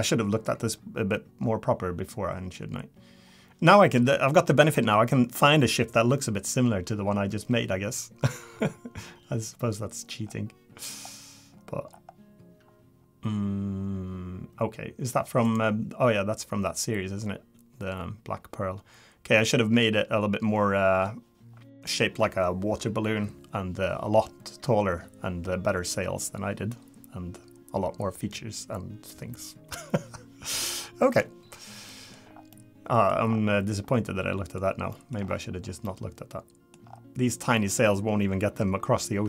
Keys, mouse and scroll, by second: 31.9 middle click, 32.2 scroll down 3, 32.5 middle click, 33.3-33.9 scroll up 5, 33.9 middle click, 34.6 scroll down 2, 35.2 middle click, 35.2-35.8 scroll down 6, 35.8 middle click, 36.8 scroll up 6, 37.5 middle click.